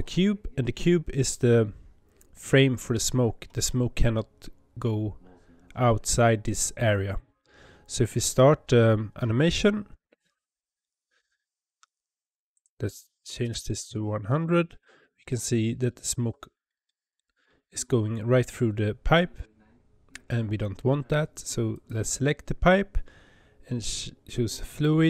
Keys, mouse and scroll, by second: 9.8 space, 12.4-13.8 drag, 13.8 KP_0, 16.7-19.8 shift+middle drag, 21.6 click, 24.6-25.0 drag.